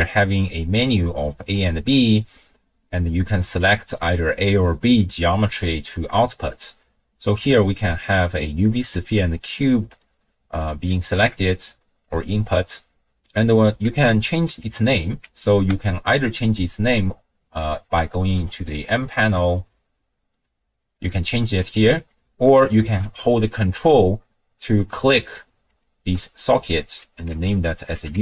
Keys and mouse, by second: 7.5-8.2 drag, 9.0-10.0 drag, 10.6 click, 15.7 n, 18.4 n, 19.6 click, 20.8 click, 21.0-22.1 drag, 22.9 n, 25.7-28.2 ctrl+drag.